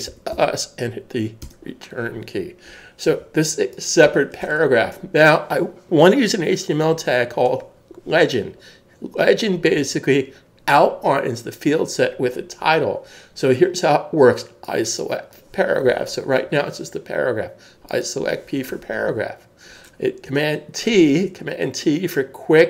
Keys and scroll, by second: 0.1-0.6 typing, 1.4 Return, 3.1 super+s.